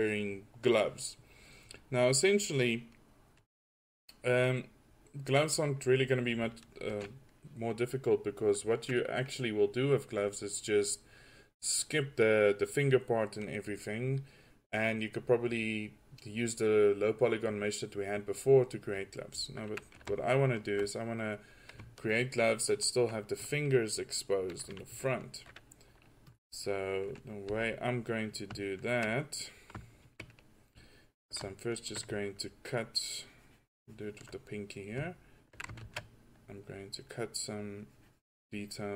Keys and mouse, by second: 27.0 click, 27.3-27.6 right drag, 27.6 f, 33.0-33.6 middle drag, 34.4 middle drag, 36.0 ctrl+z.